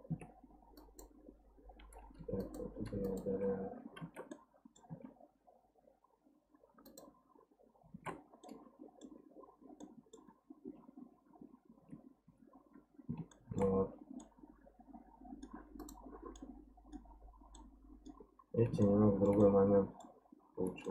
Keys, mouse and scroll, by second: 0.1 Tab, 0.8 click, 2.2 2, 2.4 click, 3.0 alt+click, 4.0 alt+z, 4.3 middle click, 4.9 x, 7.9 alt+z, 8.4-10.6 middle drag, 10.6 Tab, 11.4 Tab, 12.7-13.3 scroll up 1, 13.3 shift+middle click, 13.7-14.2 scroll down 1, 14.2-15.8 middle drag, 15.8 click, 16.4 middle click, 17.2-17.6 scroll down 2, 17.6 middle click, 18.3-18.8 scroll up 1, 18.8 shift+middle click, 19.3 scroll up 1, 19.4 middle click, 20.2-20.8 scroll down 2, 20.8 middle click.